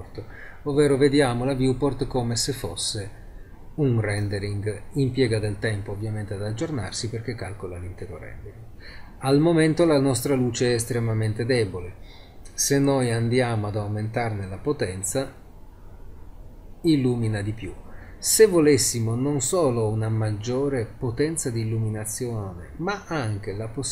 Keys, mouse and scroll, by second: 0.5 scroll up 1, 4.1 middle click, 5.7-10.8 middle drag, 13.0 click.